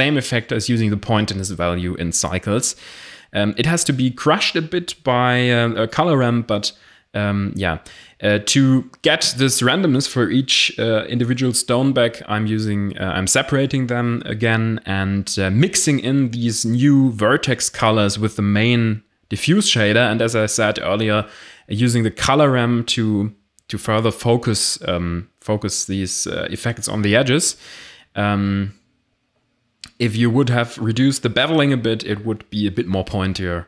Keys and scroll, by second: 2.2 Tab, 2.4 a, 3.2 p, 3.9 Tab, 4.1 a, 8.2 shift+a, 8.7 m, 8.8 x, 17.1 shift+a, 17.5 r, 17.6 m, 17.7 p, 17.9 Return, 30.0 a.